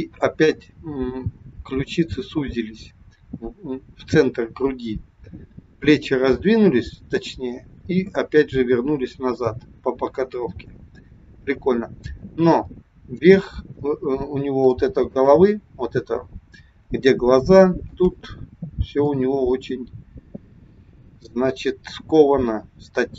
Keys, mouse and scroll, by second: 10.2 click, 13.8-14.5 scroll up 2, 14.6 shift+middle click, 19.1 click.